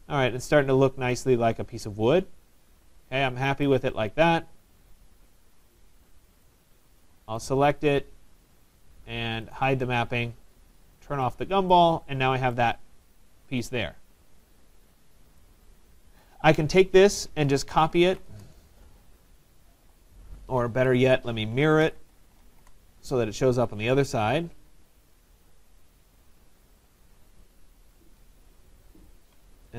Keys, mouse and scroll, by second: 2.4 typing, 3.0 Tab, 3.7 right click, 3.9 middle click, 4.2 middle click, 5.1 click, 6.5 right click, 6.5 click, 7.5 click, 9.7 click, 10.1 click, 11.4 click, 11.4 right click, 12.6 right click, 13.2 click, 15.4 right click, 16.1 right click, 16.3 click, 17.5-18.7 typing, 20.8 Escape, 21.3-22.9 typing, 25.1-25.9 typing, 25.2 middle click, 25.4-27.4 scroll, 27.4 click, 29.1 shift+click.